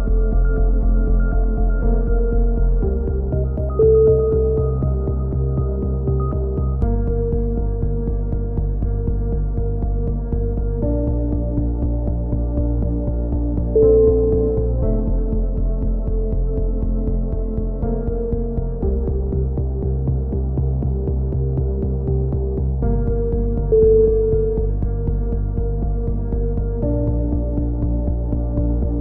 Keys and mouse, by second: 0.2-1.6 right drag, 1.2 g, 3.2 right click, 3.7 click, 4.1 click, 4.8 right click, 5.4 click, 7.1-8.5 right drag, 8.5 click, 8.9-10.6 middle drag, 10.6 click, 11.7 right click, 12.2-13.6 middle drag, 13.6 click, 14.4 a, 15.0-16.1 drag, 16.1 middle click, 16.3 click, 16.5-17.5 right drag, 17.5 middle click, 17.9-18.9 drag, 20.7-22.0 right drag, 22.0 middle click, 22.6-24.9 drag, 25.7 a, 25.8 middle click, 26.6 click, 26.9 right click, 27.6 click, 27.8 a.